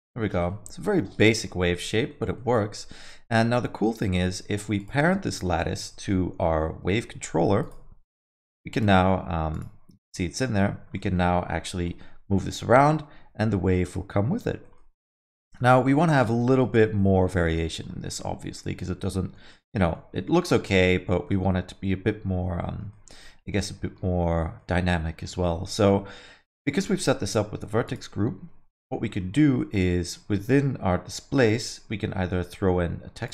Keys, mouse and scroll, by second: 0.2 alt+middle click, 0.5 middle click, 0.7 scroll down 1, 0.8 alt+middle click, 1.1 shift+z, 1.5 alt+middle click, 1.7 middle click, 1.9 scroll down 1, 2.1 alt+middle click, 2.3 middle click, 2.6 Tab, 2.9 alt+middle click, 4.8 shift+click, 5.1 middle click, 5.3 alt+middle click, 6.6 ctrl+p, 8.7 click, 9.5 click, 10.0 middle click, 10.2 scroll down 3, 10.4 alt+middle click, 10.9 middle click, 11.6 g, 15.9 alt+middle click, 16.1 middle click, 16.4 scroll up 3, 16.6 alt+middle click, 16.8 middle click, 17.1 alt+middle click, 17.6 middle click, 17.9 scroll down 1, 18.1 alt+middle click, 19.5 middle click, 19.7 scroll down 2, 19.9 alt+middle click, 20.4 middle click, 21.3 alt+middle click, 22.6 middle click, 22.9 alt+middle click, 24.6 middle click, 25.5 scroll up 2, 26.6 click, 26.8 alt+scroll up 1, 26.9 alt+middle click, 27.8 click, 28.7 middle click, 29.0 alt+middle click, 33.2 click.